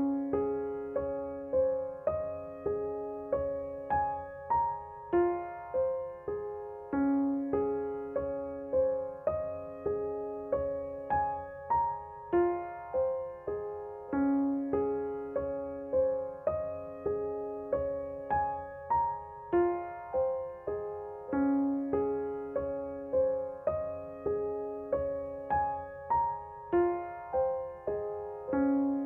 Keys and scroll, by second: 9.7 g, 14.9 Page_Up, 15.1 Page_Up, 15.6 Page_Up, 20.8 s, 24.2 Page_Down, 24.4 Page_Down.